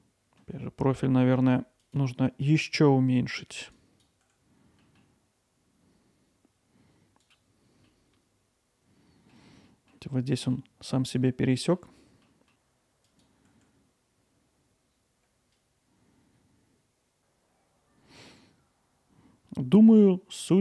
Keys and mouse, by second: 1.8 click, 2.3 middle click, 3.7 click, 4.8 middle click, 7.2 click, 9.3 alt+middle click, 9.7 middle click, 10.3 middle click, 11.3 middle click, 12.3 middle click.